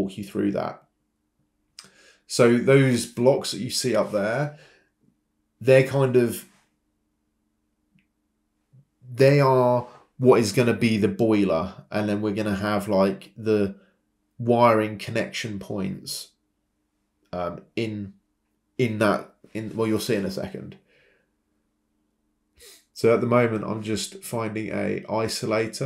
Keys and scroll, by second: 3.5 Escape, 3.5 space, 12.7 Escape, 18.5 ctrl+c, 18.7 ctrl+v, 24.2-25.0 typing.